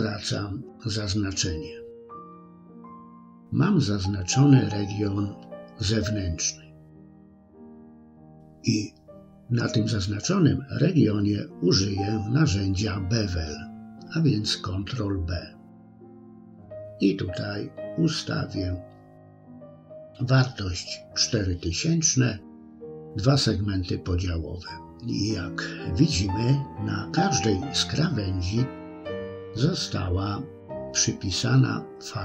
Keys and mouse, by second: 4.4 middle click, 9.3 ctrl+b, 14.0-18.5 drag, 22.9 middle click, 25.3-28.3 middle drag, 29.0 KP_3.